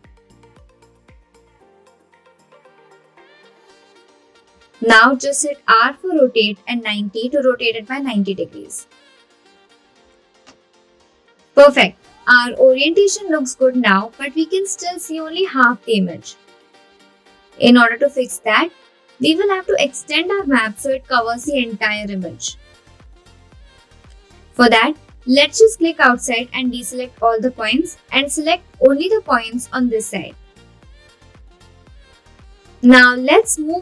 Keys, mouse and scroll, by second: 6.0 r, 7.7 KP_9, 7.8 KP_0, 8.7 Return, 23.9 click, 26.4 click, 31.5 g.